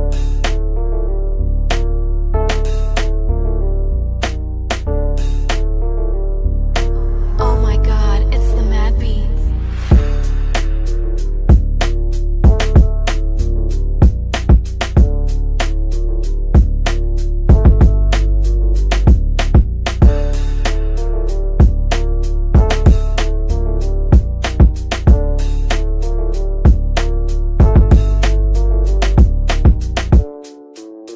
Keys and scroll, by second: 3.1 ctrl+r.